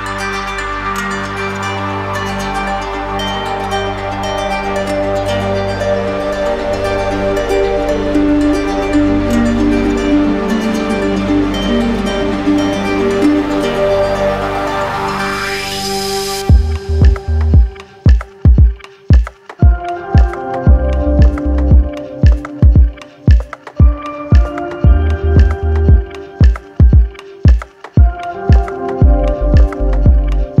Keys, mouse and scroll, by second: 1.2 ctrl+click, 3.5 shift+click, 4.9 shift+click, 5.3 ctrl+click, 5.7 q, 6.6 click, 7.4 click, 8.1 click, 8.8 alt+click, 9.0 alt+click, 9.4 click, 12.4 click, 23.9 click, 25.4 click, 25.8 alt+click, 26.6 alt+click, 28.2-29.3 drag, 29.3-30.4 drag.